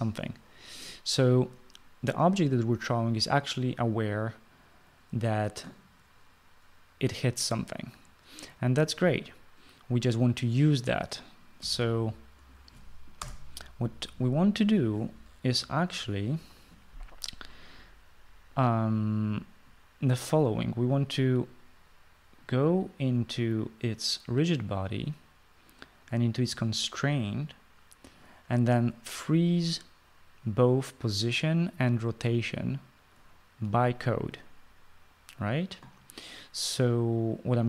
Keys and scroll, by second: 12.4-13.0 typing, 13.9 Return.